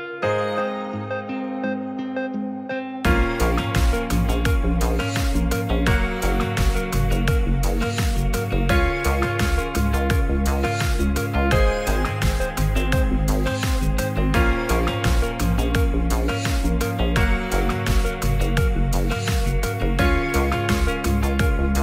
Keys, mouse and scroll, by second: 3.1 Tab, 3.7 Tab, 3.9 middle drag, 4.4 alt+z, 4.6-5.9 middle drag, 6.9 middle drag, 7.4 s, 7.4 z, 8.1 right click, 8.5 s, 8.5 z, 9.2 click, 9.4 ctrl+a, 10.2 middle click, 10.7-11.3 middle drag, 11.5-12.1 middle drag, 13.0 shift+middle drag, 13.4 Tab, 14.6 shift+click, 15.2 ctrl+b, 18.3 Tab, 18.5-19.2 middle drag, 19.5-20.1 middle drag, 20.7 click, 20.8 click.